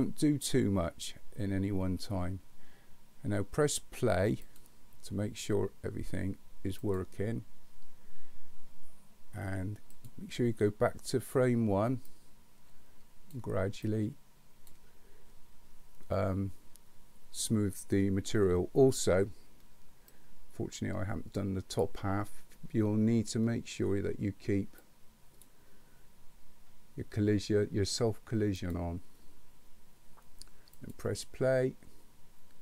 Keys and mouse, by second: 4.4 click, 6.9 click, 12.1-13.3 drag, 13.8 click, 20.3-21.9 drag, 24.9 click, 28.6 click, 30.9 click.